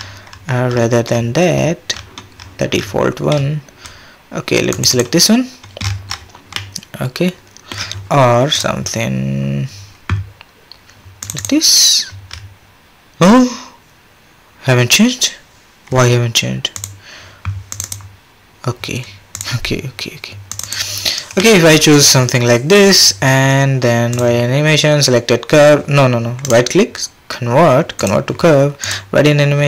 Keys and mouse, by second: 5.8-6.5 middle drag, 7.1-8.6 middle drag, 16.7 click, 19.3 click, 21.7-24.1 middle drag, 26.6-29.6 drag.